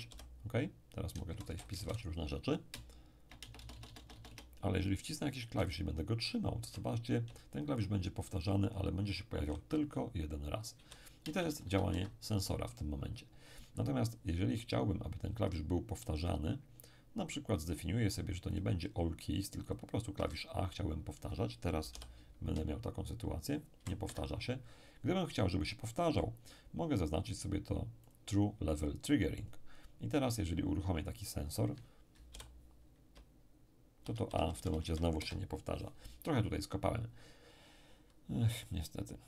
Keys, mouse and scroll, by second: 0.1 p, 1.1-2.9 typing, 5.5 a, 5.8 a, 11.2 BackSpace, 11.5 BackSpace, 11.6 BackSpace, 11.9 Escape, 18.5 click, 19.7 click, 20.1 a, 21.9 p, 22.5 a, 22.7 a, 24.0 Escape, 28.1-30.3 drag, 28.7-30.3 middle drag, 32.3 p, 33.1 a, 33.3 a, 35.1 Escape.